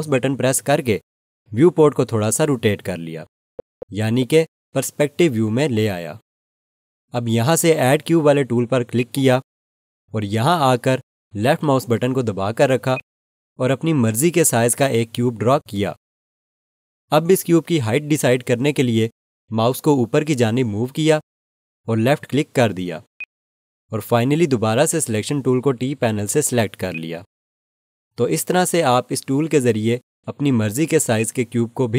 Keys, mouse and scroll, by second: 0.1 alt+click, 3.3-7.0 scroll down 1, 8.9 click, 12.9 click, 23.1 click, 26.9 click, 31.1 alt+click.